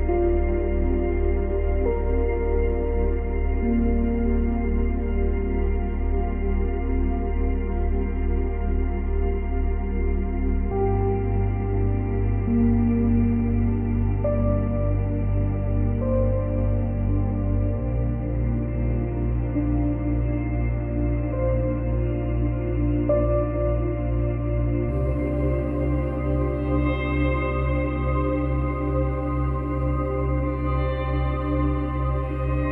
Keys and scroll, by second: 6.2 ctrl+z, 7.3 Delete, 16.2 ctrl+z, 21.5 ctrl+c, 21.7 ctrl+v, 25.6 ctrl+v, 26.7 ctrl+v.